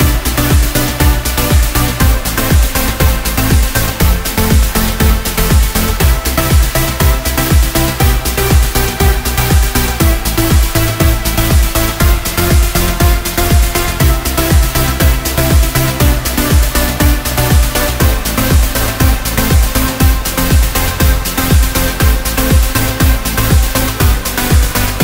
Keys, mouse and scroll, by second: 0.0-25.0 drag.